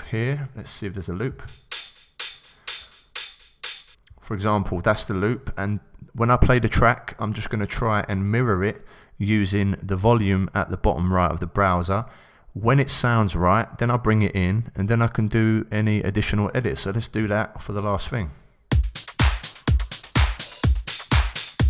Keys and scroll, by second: 0.2 Right, 17.9 Return, 18.7 s.